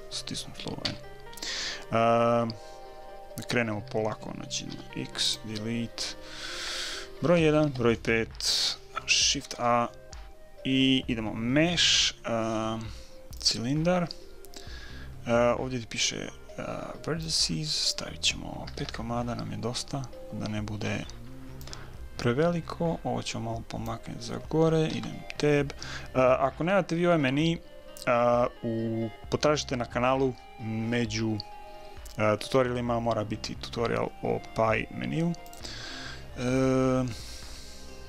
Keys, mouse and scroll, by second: 0.9 n, 4.7 x, 7.2 KP_1, 7.6 KP_5, 9.4 shift+a, 17.2-19.1 drag, 20.8-22.9 middle drag, 21.6-23.4 drag, 24.9 Tab, 37.1-38.0 middle drag.